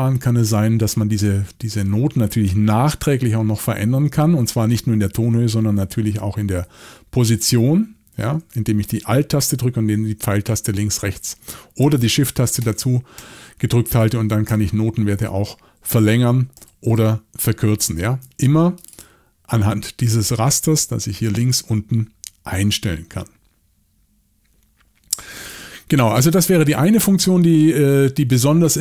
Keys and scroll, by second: 6.0 alt+Right, 6.6 alt+Right, 7.5 alt+Left, 8.3 alt+Left, 12.6 alt+shift+Right, 13.2 alt+shift+Right, 14.0 alt+shift+Left, 14.5 alt+shift+Left, 15.8 alt+shift+Right, 16.1 alt+shift+Right, 16.5 alt+shift+Left, 16.9 alt+shift+Left.